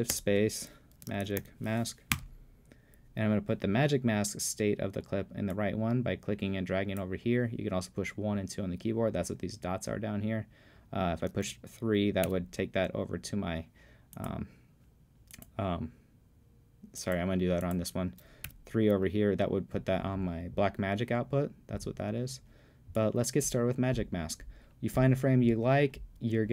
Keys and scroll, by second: 0.1-1.9 typing, 2.2 Return, 12.3 3, 18.5 3.